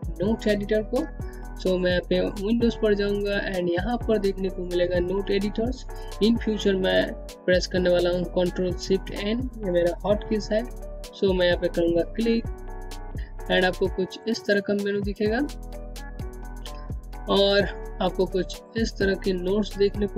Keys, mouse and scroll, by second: 3.1 click, 11.4 click, 15.1 click, 15.2-16.3 scroll up 1, 17.1 click.